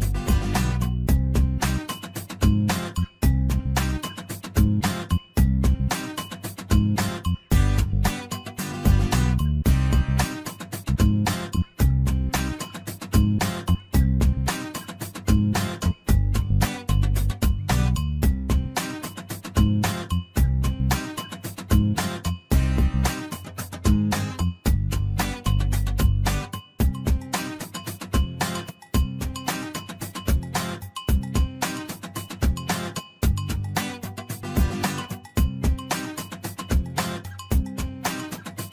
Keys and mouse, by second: 1.9 click, 3.3 click, 3.5-5.2 drag, 6.2-8.3 drag, 8.9 click, 9.8-11.9 drag, 13.2-15.2 drag, 15.4 shift+middle click, 16.0 click, 16.6-18.2 drag, 19.0 shift+middle click, 21.0-22.2 shift+middle drag, 22.7 shift+middle click, 23.7-25.4 middle drag, 27.6 middle click, 31.0 middle click, 32.2 f, 32.9 shift+middle click, 33.6 shift+middle click, 34.7 ctrl+r, 37.0 shift+middle click, 38.1 shift+middle click.